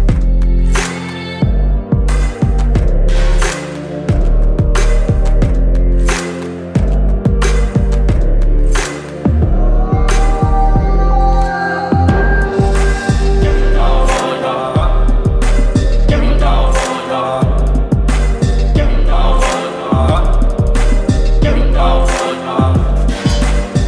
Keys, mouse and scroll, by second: 3.3-7.5 shift+drag, 7.9-10.7 shift+drag, 11.4 alt+scroll up 1, 12.5-17.8 shift+drag, 22.6-23.5 click.